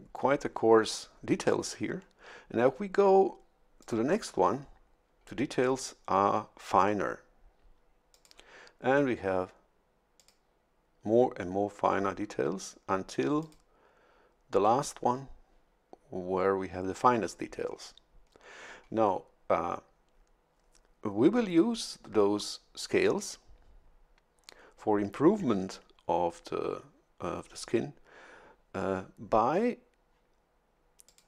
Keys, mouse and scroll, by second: 3.8 click, 8.1 click, 10.1 click, 13.4 click, 31.0 click.